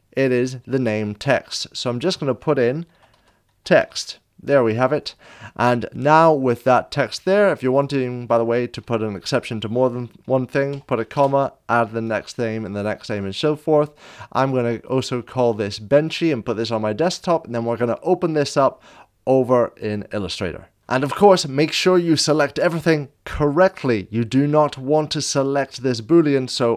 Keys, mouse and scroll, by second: 1.9 click, 2.9 shift+t, 3.1 e, 3.7 t, 7.0 click, 9.1 right click, 11.1 space, 12.6 BackSpace, 14.4 click, 22.1 click, 23.9 middle click, 26.1 click.